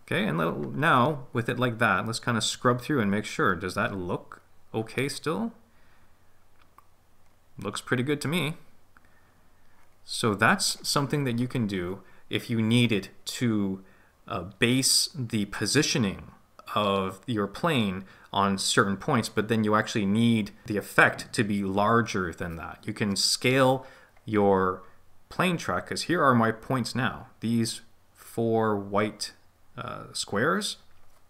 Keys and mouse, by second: 5.2-10.8 drag.